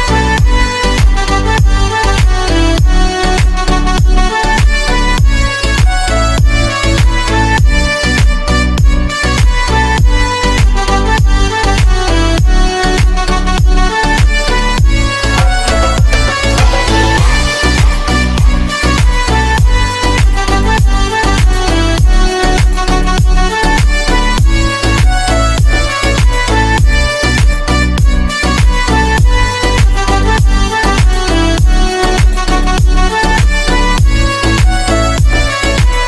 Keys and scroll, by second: 18.0 c, 27.6 Delete.